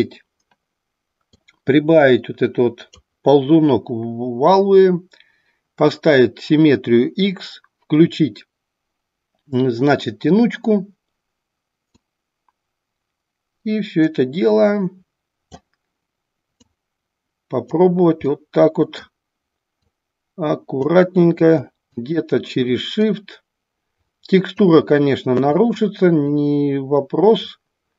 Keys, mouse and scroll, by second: 1.5-3.0 drag, 11.9-15.7 drag, 16.6-17.7 drag, 18.2 middle click, 19.8-20.9 drag, 21.4 click, 21.9 click, 23.0-24.6 drag, 25.5 click, 26.2-27.6 drag.